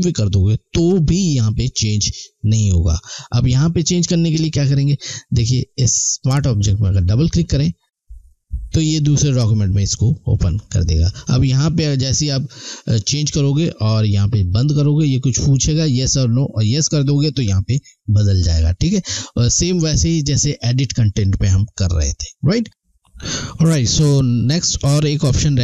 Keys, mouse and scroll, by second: 6.9 click, 7.2 click, 10.4 click, 14.5 click.